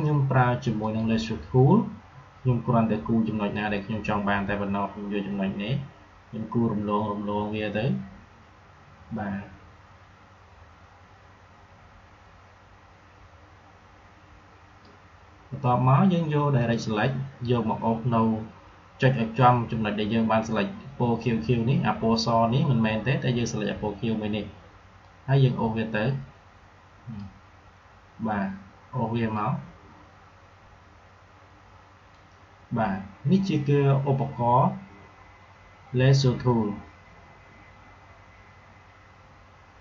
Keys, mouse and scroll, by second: 0.7 click, 3.4-14.9 drag, 16.4 click, 24.9-29.2 drag, 29.2-34.3 drag.